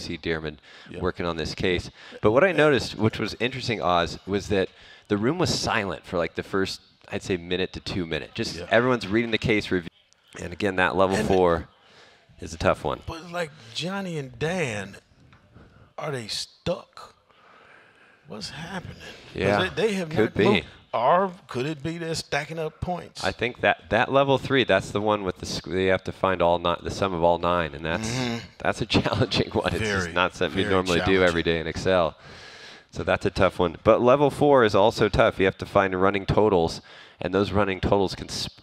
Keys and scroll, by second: 0.0-1.7 typing, 3.0 ctrl+Page_Down, 3.1 ctrl+Page_Down, 5.3 ctrl+shift+Down, 5.3 ctrl+shift+Right, 7.3 ctrl+Page_Up, 9.0 ctrl+shift+Right, 9.0 ctrl+shift+Down, 9.8 ctrl+v.